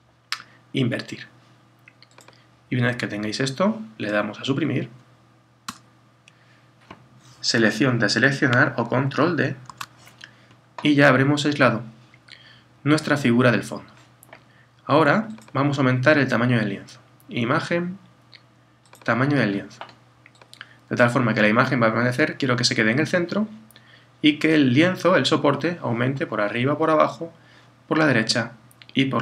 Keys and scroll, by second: 9.7 super+d.